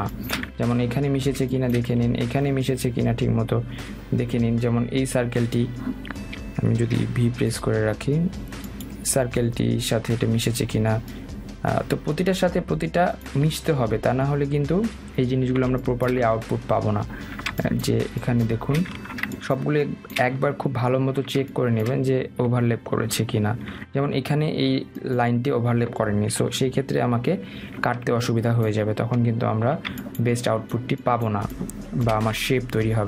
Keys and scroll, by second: 27.2 Down.